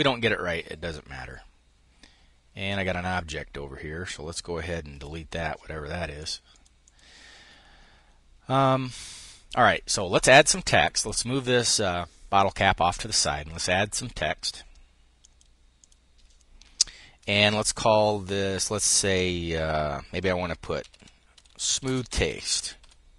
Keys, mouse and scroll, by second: 4.5 Delete, 5.7 click, 6.4 click, 9.2-12.1 drag, 20.1-22.9 typing.